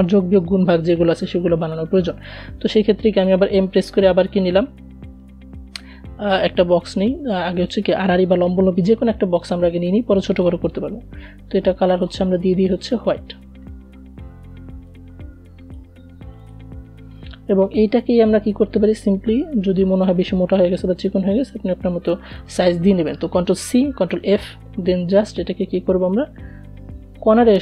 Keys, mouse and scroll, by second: 1.7 m, 3.2 alt+scroll up 1, 4.5-10.0 drag, 13.1-14.7 drag, 15.8 v, 16.7-17.2 alt+scroll up 1, 19.3-21.9 drag, 21.9 ctrl+c, 22.4 ctrl+f, 22.8 v, 25.7-27.6 drag.